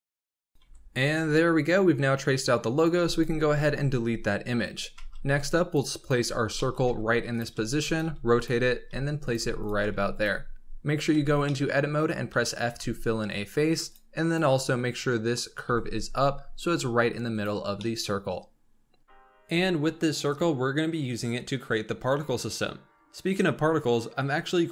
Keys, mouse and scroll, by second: 0.0-0.4 typing, 0.3 click, 0.6 Tab, 0.9-1.6 scroll down 9, 2.7 click, 2.9 x, 3.5-4.2 scroll up 5, 4.2 scroll down 4, 4.4-4.9 scroll up 6, 4.9 shift+a, 5.9 click, 6.2-6.7 scroll up 5, 6.5 shift+middle drag, 6.8-9.7 typing, 11.0 Tab, 11.4 middle click, 12.2 f, 12.6 Tab, 13.1 scroll down 2, 13.8 click, 14.2 click, 14.9 KP_1, 15.6 g, 17.6 scroll down 4, 17.7-19.8 middle drag, 19.8 KP_7.